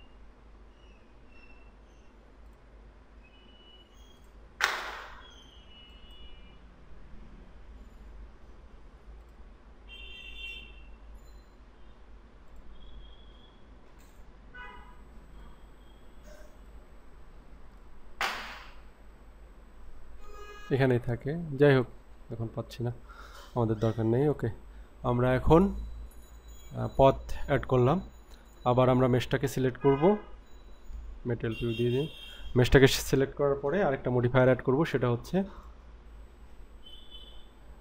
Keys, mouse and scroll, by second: 2.4 click, 4.2 click, 6.0 click, 9.2-11.1 drag, 12.5-16.7 drag, 17.7-21.2 drag, 22.5 scroll down 3, 23.0 scroll up 2, 23.6-25.7 scroll down 1, 28.5 click, 31.5 click, 35.6-37.8 drag.